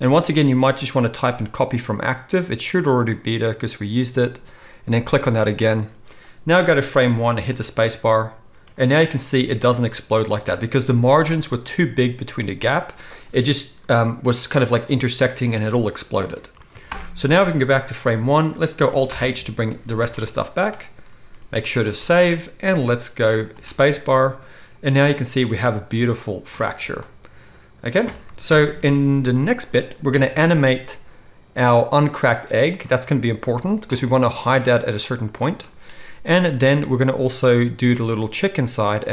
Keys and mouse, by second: 7.4 space, 10.3 space, 16.8 shift+Left, 19.0 alt+h, 20.1 alt+a, 21.6 ctrl+s, 21.8 ctrl+s, 23.5 space, 28.4 shift+Left, 30.1 KP_1, 32.8-35.2 middle drag, 35.2 click, 35.3-39.1 middle drag.